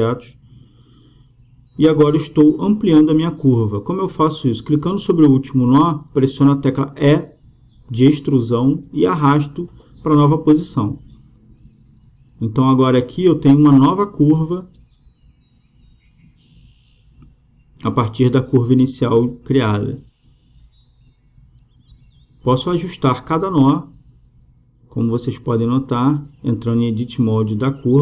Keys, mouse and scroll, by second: 1.2 e, 3.5 e, 6.3-8.2 right drag, 7.0 e, 10.3 Tab, 12.0-13.7 drag, 17.3-19.1 drag, 23.1 Tab, 23.9-25.1 right drag, 25.1 middle click, 25.9-26.9 drag.